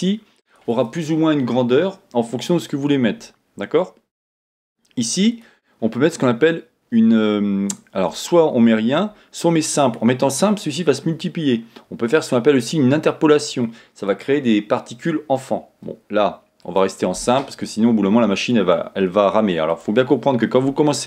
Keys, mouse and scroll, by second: 4.3-5.3 scroll down 1, 5.8-7.2 scroll down 1, 9.8 click, 14.1 click, 16.8-17.8 drag, 17.8 scroll down 1, 19.7 click.